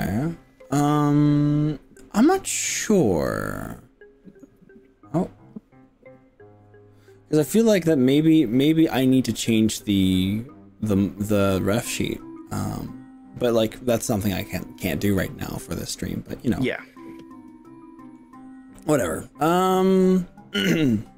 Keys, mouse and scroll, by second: 4.2-5.4 middle drag, 7.0-8.4 middle drag, 9.0 middle click, 11.9-13.6 middle drag, 16.4-18.2 middle drag, 18.8-21.1 middle drag.